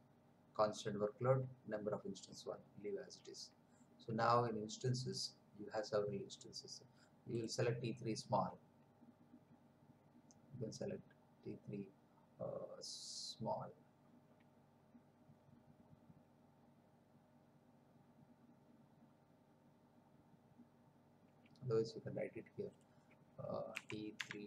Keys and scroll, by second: 23.7-24.4 typing.